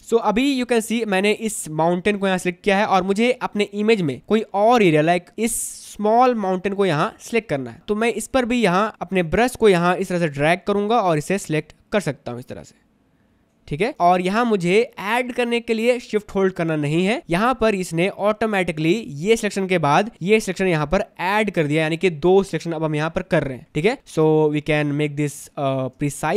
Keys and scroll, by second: 0.2 space, 5.5 space, 9.1 ctrl+z, 14.2 space, 18.3 space, 25.6 space.